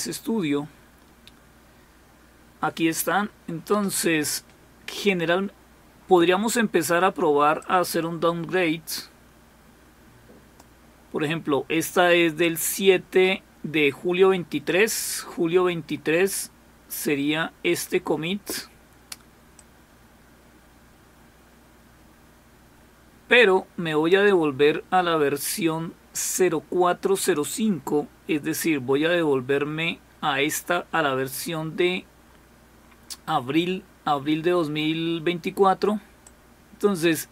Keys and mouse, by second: 7.6-11.2 drag, 12.4-14.7 drag, 19.6-24.2 drag, 36.3-37.3 drag.